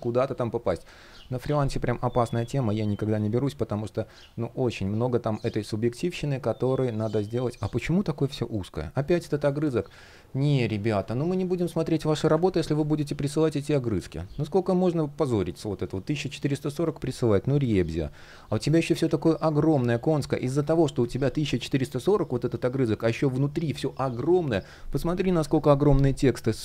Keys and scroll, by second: 12.0 super+\, 17.2 super+\, 25.1 super+\.